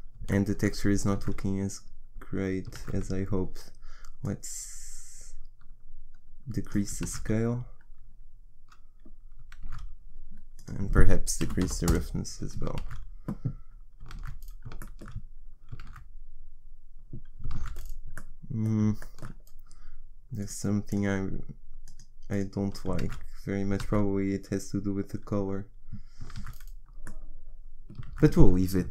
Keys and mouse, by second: 1.1 shift+z, 2.8 shift+z, 7.0 shift+z, 9.7 shift+z, 12.8 shift+z, 14.2 shift+z, 15.8 shift+z, 17.5 shift+z, 20.4 click, 21.1-23.8 middle drag, 23.8 shift+z, 27.1 shift+z, 28.0 shift+z, 28.8 shift+z.